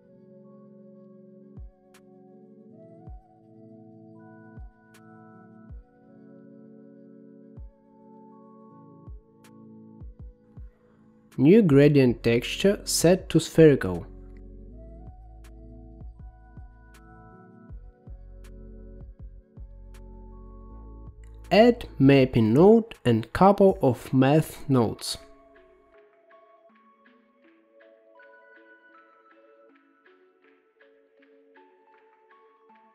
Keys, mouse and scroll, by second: 1.4-2.1 scroll down 6, 2.1 middle click, 2.9 click, 3.5 g, 5.1 middle click, 6.3-7.3 scroll up 7, 7.3 middle click, 8.5-10.4 drag, 12.1 shift+a, 16.8-21.2 drag, 21.8-22.8 middle drag, 23.8 click, 24.8 shift+d, 27.2 shift+a, 30.4 click, 31.4 click, 31.5 g.